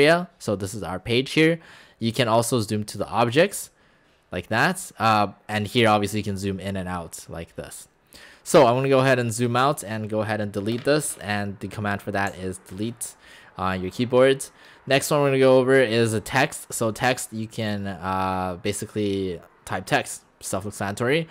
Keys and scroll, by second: 12.3 Delete.